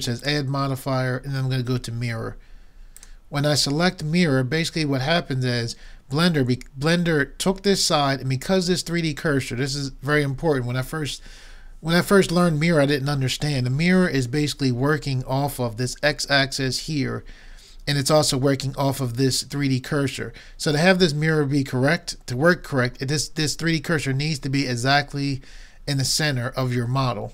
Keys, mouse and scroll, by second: 0.2-1.8 drag, 1.8 right click.